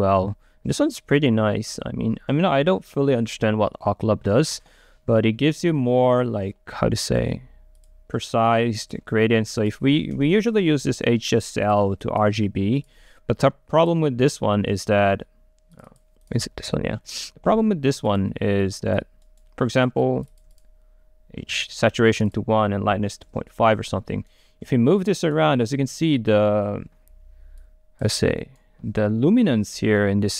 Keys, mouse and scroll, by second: 0.0 click, 0.3-1.4 scroll up 2, 1.4-3.9 drag, 7.3-11.7 drag, 12.2-14.8 drag, 14.8-15.9 right drag, 15.9-19.4 drag, 19.4 right click, 20.3-23.4 drag, 23.4 Return, 24.8-27.5 right drag, 27.8 click, 28.5-30.3 right drag.